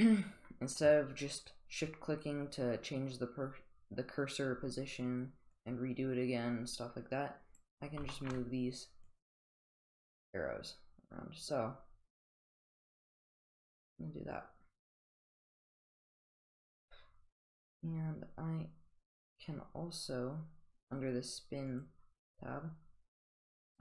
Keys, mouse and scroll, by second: 5.5-7.6 drag, 8.1 shift+middle drag, 9.0-13.9 drag, 15.0-16.4 drag, 21.7 click.